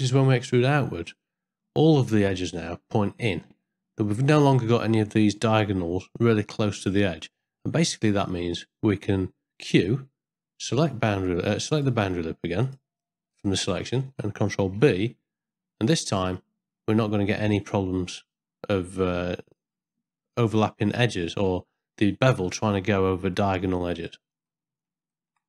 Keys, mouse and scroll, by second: 0.4 ctrl+middle click, 1.2 middle click, 3.1 ctrl+middle click, 3.7 middle click, 7.6 middle click, 9.6 q, 13.3 middle click, 14.8 ctrl+b, 24.6 middle click, 25.1 ctrl+middle click.